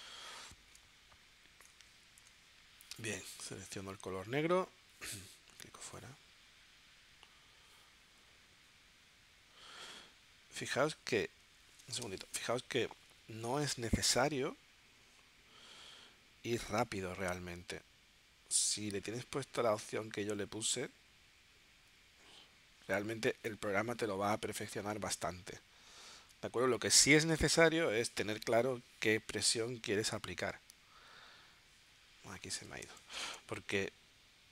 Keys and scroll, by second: 29.1 shift+b.